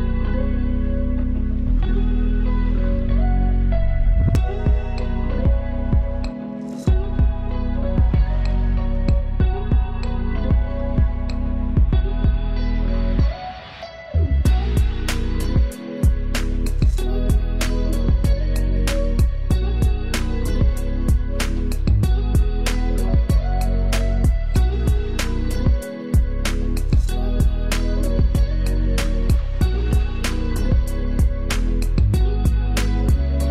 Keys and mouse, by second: 8.0-12.0 drag, 14.1-17.2 drag, 18.6 ctrl+space, 18.9 ctrl+click, 19.2 ctrl+space, 20.6 ctrl+click, 21.7 ctrl+z, 24.0 ctrl+u, 25.9-33.3 drag.